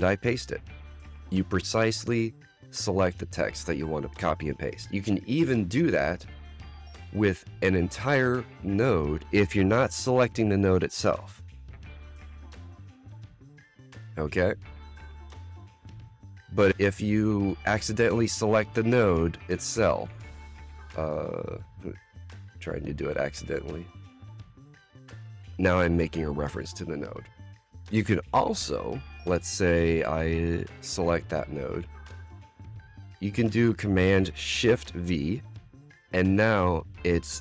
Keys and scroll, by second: 11.6 super+c, 13.2 Return, 13.7 super+v, 24.4 Return, 24.8 super+v, 30.7 super+c, 33.1 Return, 33.4 Tab, 35.6 shift+super+v.